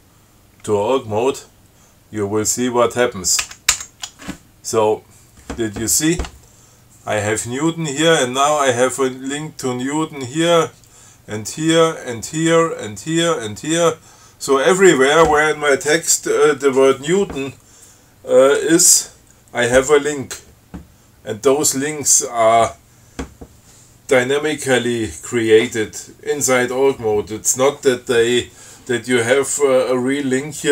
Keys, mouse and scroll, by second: 3.6 ctrl+c, 14.2-14.5 scroll down 2.